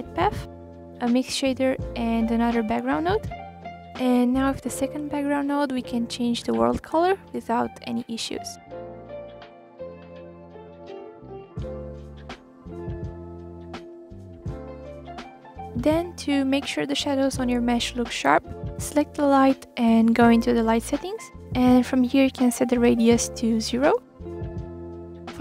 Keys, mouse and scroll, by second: 0.8-2.2 drag, 2.4 click, 3.3 shift+d, 5.8-7.0 drag, 7.0 ctrl+z, 7.4 click, 9.0-10.5 middle drag, 11.8 click, 13.2 click, 18.5-21.5 middle drag, 21.5-22.6 drag, 23.1-23.6 scroll up 7, 23.6-24.5 scroll down 4, 24.5 click, 25.3 click.